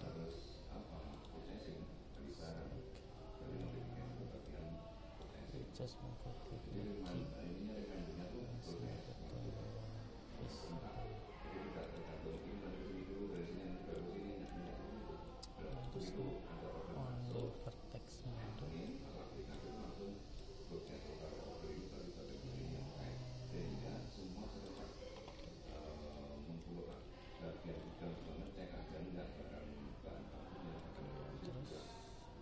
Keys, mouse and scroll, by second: 0.4 ctrl+z, 1.1-2.2 right drag, 2.9 click, 4.4 click, 6.4 g, 12.4-15.7 middle drag, 15.7 click, 18.8 click, 20.0 click, 20.9 click, 22.1 g, 25.5 middle click, 28.2 middle click, 29.5 middle click.